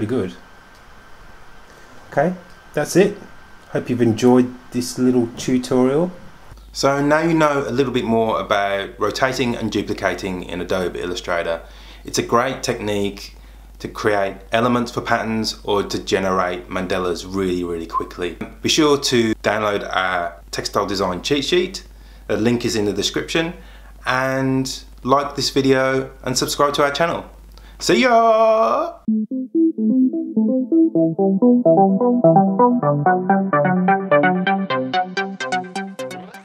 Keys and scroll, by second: 1.4 super+g.